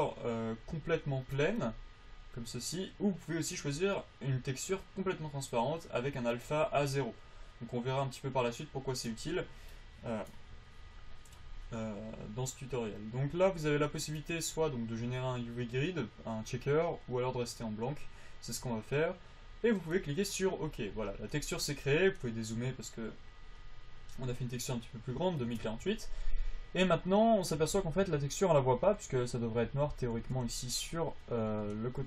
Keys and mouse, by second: 25.9 Tab, 28.3 Tab, 30.0 alt+z, 30.5 alt+z.